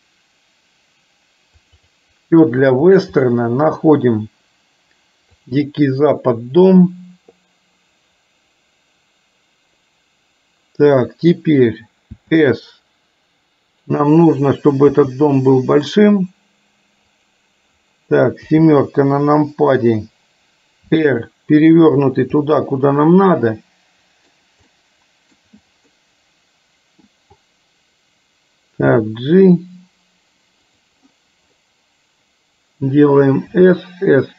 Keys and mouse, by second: 12.3 s, 15.0 s, 18.5 KP_7, 20.9 r, 22.5 middle click, 23.8 middle click, 25.0 middle click, 26.0-27.1 middle drag, 29.0 g, 33.5 s.